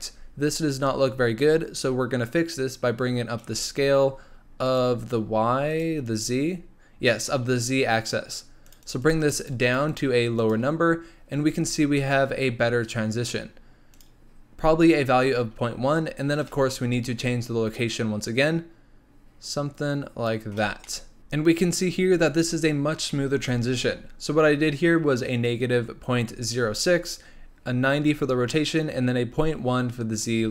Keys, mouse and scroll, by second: 0.2-0.9 scroll up 1, 0.9-3.1 scroll up 3, 3.4-4.7 drag, 5.1 click, 6.0-7.2 drag, 8.6-10.6 drag, 10.9 scroll down 3, 11.4-13.9 scroll up 2, 13.9 click, 16.3-20.8 drag, 20.8-21.2 middle drag, 21.2-23.6 scroll up 2.